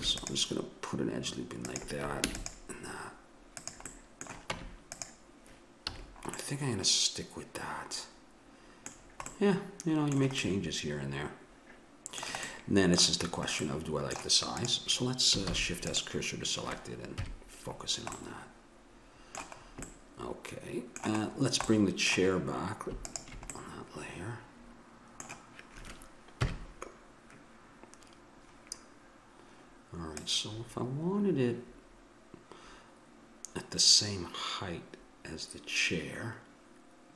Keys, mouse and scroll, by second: 0.0 ctrl+r, 2.2 ctrl+r, 4.5 Tab, 5.8 a, 6.6-8.4 middle drag, 14.6 right click, 15.4 shift+s, 17.1 KP_Decimal, 18.2-20.4 middle drag, 23.0-25.3 middle drag, 26.4 KP_1, 30.1-32.1 drag.